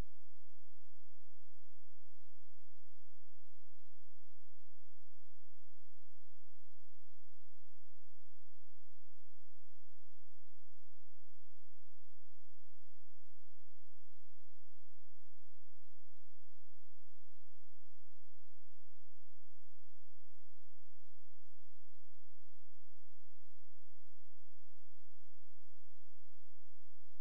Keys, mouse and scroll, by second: 0.9 shift+click, 11.6 click.